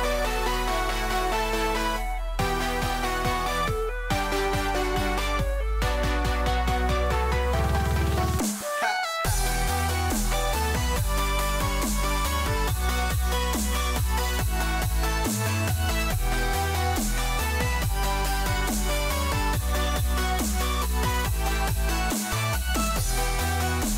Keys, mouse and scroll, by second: 5.0 g.